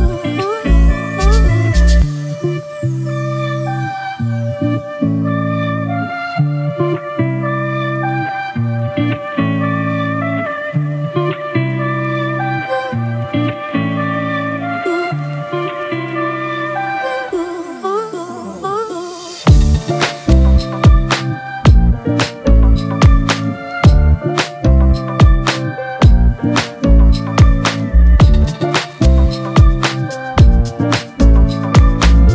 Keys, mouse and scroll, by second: 7.1 space, 8.5 space, 10.3 space, 14.7 space, 17.5 ctrl+click, 22.4 space, 24.5 space, 24.5 double click, 24.6 space, 28.1 ctrl+z, 30.8 ctrl+Return, 31.6 ctrl+-, 31.7 ctrl+-, 32.0 ctrl+-, 32.2 ctrl+-.